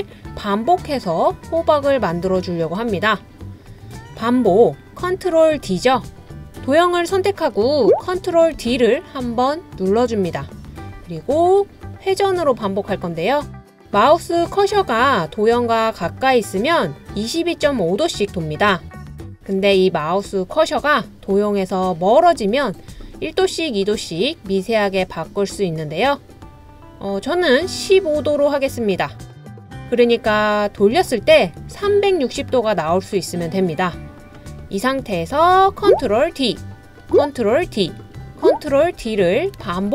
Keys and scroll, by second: 8.6 super+d, 36.0 super+d, 37.7 super+d, 39.0 super+d, 39.8 super+d.